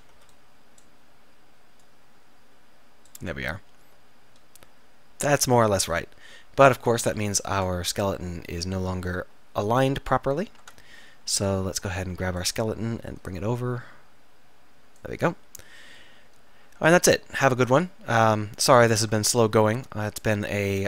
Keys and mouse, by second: 0.2 b, 3.5 z, 7.1 KP_7, 7.6 Tab, 10.7 Tab, 11.4 a, 11.8 b, 13.3-15.1 drag, 17.2-18.8 middle drag, 19.1 Tab, 19.8 Tab.